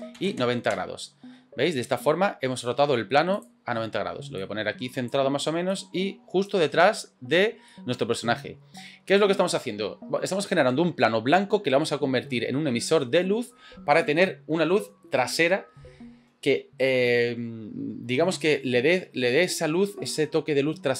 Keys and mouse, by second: 1.7-2.6 middle drag, 3.4 click, 4.5 click, 5.7 click, 6.6-7.4 middle drag, 7.7-10.6 middle drag.